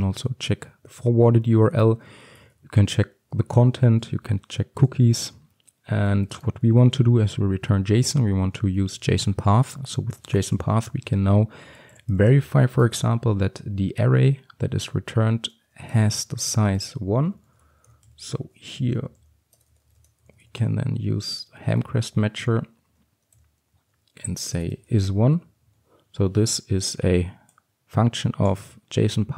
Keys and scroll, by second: 8.1 Return, 21.7 Return.